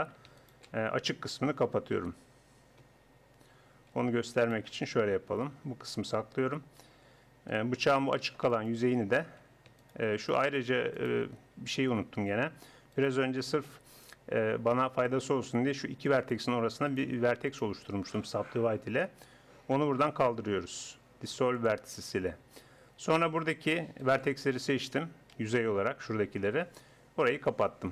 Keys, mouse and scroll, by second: 2.0 f, 2.8 Escape, 5.3 ctrl+l, 6.1 h, 7.6 a, 7.9 a, 12.1 click, 12.9-14.8 middle drag, 16.2-19.2 middle drag, 20.0 x, 23.0 a, 23.6 a, 25.4 z, 26.4 z, 27.2 f.